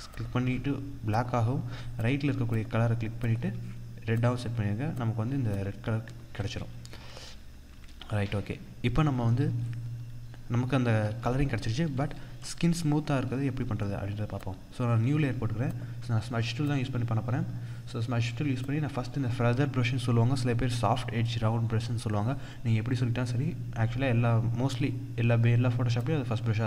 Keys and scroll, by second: 6.9 ctrl+=, 10.8 ctrl+=, 12.4 ctrl+=.